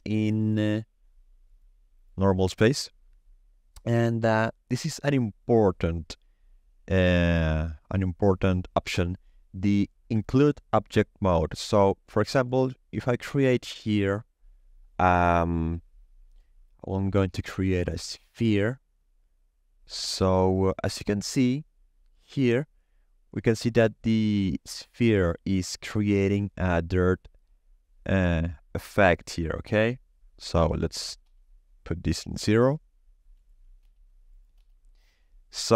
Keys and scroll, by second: 13.4 shift+a, 31.0 0, 31.2 Return, 33.6 Return.